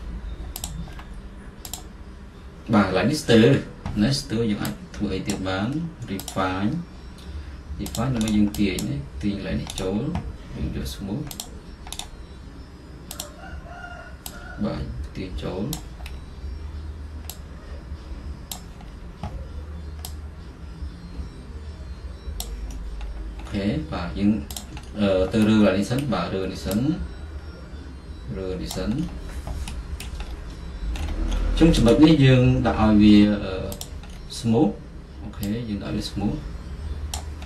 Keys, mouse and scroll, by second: 1.1-3.9 middle drag, 3.9 click, 5.4-15.5 drag, 15.8 click, 16.2-18.4 middle drag, 18.6-21.1 drag, 21.1 middle click, 22.5 click, 22.8-24.7 middle drag, 24.7 click, 25.0-28.2 middle drag, 28.8 click, 29.1-32.1 middle drag, 30.4-31.0 scroll, 31.0-31.4 scroll up 1, 31.4-32.1 scroll, 32.1-34.0 right drag, 34.0 click, 34.2-36.4 middle drag, 34.2-36.3 scroll, 36.3 scroll up 1, 37.3 click.